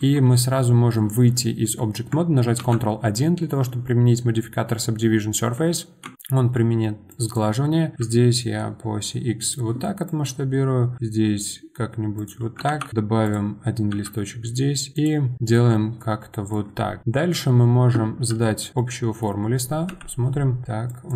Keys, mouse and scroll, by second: 0.0 Tab, 2.6 ctrl+1, 6.0 Tab, 7.1 click, 7.9 s, 10.0 click, 10.9 s, 15.3-17.0 middle drag, 17.0 KP_1, 18.8-19.9 middle drag, 19.9 KP_1, 20.9 click.